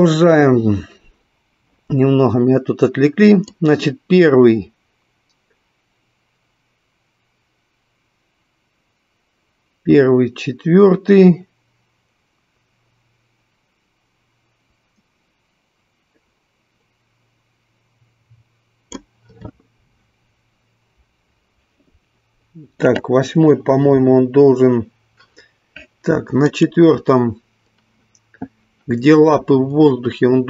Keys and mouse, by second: 4.2-19.6 drag, 27.0 click.